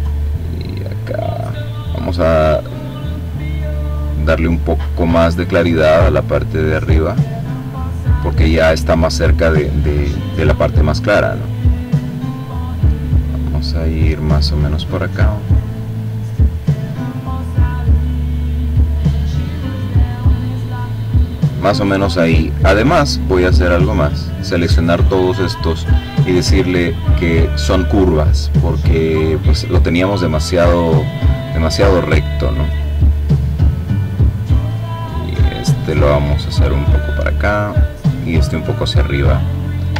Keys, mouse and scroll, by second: 3.1 click, 5.0-8.9 drag, 9.7-12.1 drag, 12.5-14.0 drag, 14.3-15.3 drag, 15.6-17.3 drag, 18.2-19.3 drag, 19.4 click, 21.9-23.7 drag, 25.7 click, 27.9 click, 30.4 click, 31.1-32.3 drag, 32.4 click, 33.1 click, 34.0-36.1 drag, 36.2-37.9 drag, 38.7 click, 39.3-39.9 ctrl+scroll down 2.